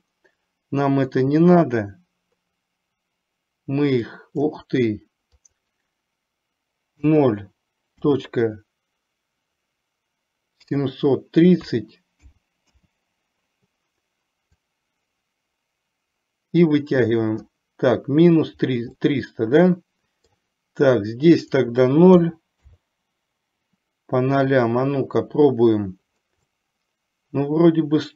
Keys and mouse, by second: 1.3-4.6 drag, 5.3-13.0 drag, 14.7-17.6 drag, 19.0-20.3 middle drag, 21.7-22.8 drag, 26.6-28.1 middle drag.